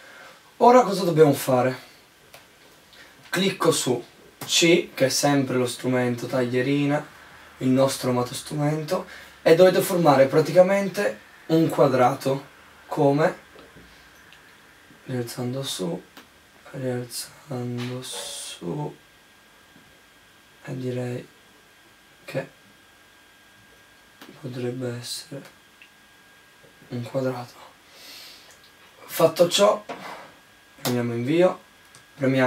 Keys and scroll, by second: 30.6 Return.